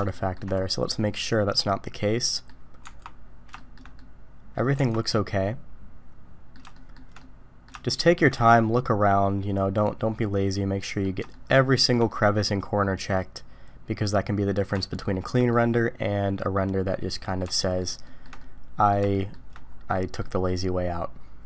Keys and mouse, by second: 0.1 shift+middle drag, 0.9-2.5 middle drag, 2.8 Tab, 3.6 shift+middle drag, 4.0 middle click, 4.8 Tab, 5.1-6.5 middle drag, 6.7 shift+middle click, 7.2-7.7 middle drag, 7.9 shift+middle click, 8.4-11.0 middle drag, 11.3 shift+middle click, 11.7 shift+middle drag, 12.1-14.5 middle drag, 14.9-15.3 shift+middle drag, 15.5-17.3 middle drag, 17.6 shift+middle drag, 18.0 shift+middle drag, 18.4-18.9 middle drag, 19.1 shift+middle click, 19.9 middle drag, 20.5-21.4 middle drag.